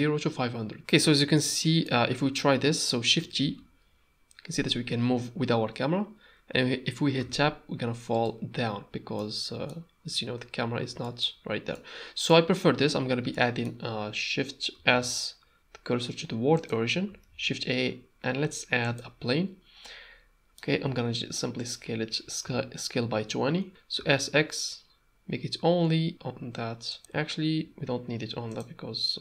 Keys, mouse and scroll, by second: 1.4-1.8 ctrl+middle drag, 3.4 shift+t, 9.2-9.7 middle drag, 11.0 shift+middle drag, 11.7-12.3 middle drag, 13.3 middle click, 14.9 shift+s, 17.3 shift+a, 19.8-20.5 middle drag, 20.8 s, 22.4 s, 23.7 Tab, 23.9 s, 27.6 s.